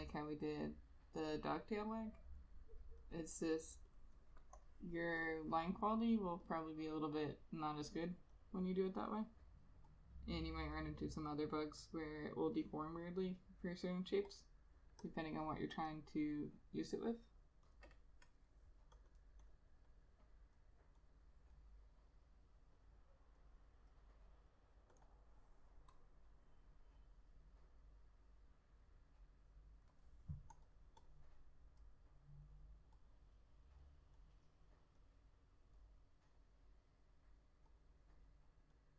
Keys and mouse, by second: 16.0 double click, 19.2 double click.